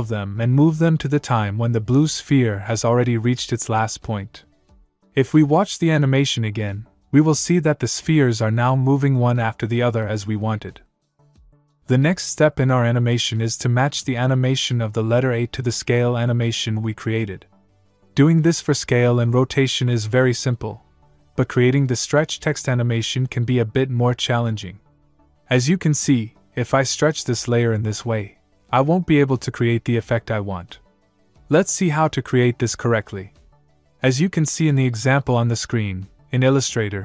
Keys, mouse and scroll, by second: 2.9 click, 5.1 space, 9.2 space, 14.0 click, 17.7 click, 32.0 ctrl+z, 36.2 click.